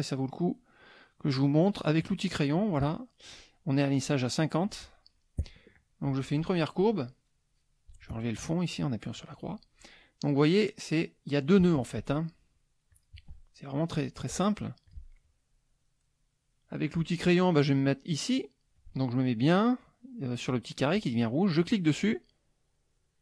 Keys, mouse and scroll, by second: 2.0 click, 2.9 middle click, 4.8 middle click, 6.1-6.6 drag, 9.2 click, 12.9 click, 14.8 click, 21.5-23.2 drag.